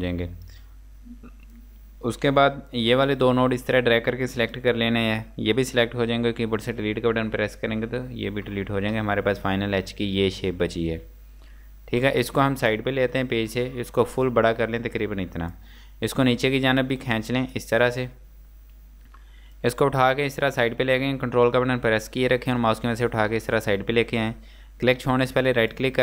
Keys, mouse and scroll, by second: 6.4 Delete, 8.4-8.8 scroll down 1, 9.0 space, 11.2 scroll down 1, 12.0 click, 12.9-13.8 scroll down 1, 14.2 click, 15.3 click, 17.9-19.5 scroll down 1, 19.5 click, 25.5 right click.